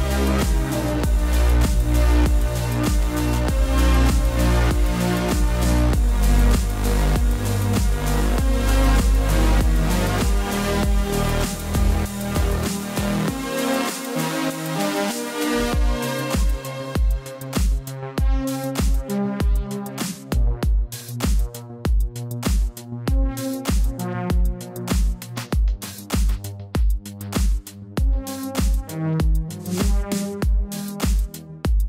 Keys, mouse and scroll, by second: 0.9 v, 1.5 click, 7.0 click, 8.0 v, 9.9 right click, 11.0 click, 11.4 ctrl+t, 12.3 t, 13.2 click, 17.3 Return, 17.5-18.8 typing, 17.9 click, 18.2 ctrl+=, 18.4 click, 18.8 click, 19.0 ctrl+t, 19.3 shift+click, 19.9 Return, 20.0 click, 22.8 b, 25.1 typing, 27.1 v, 27.3 click, 28.2 b, 29.1 b, 29.4 Down, 29.8 space, 29.9 click.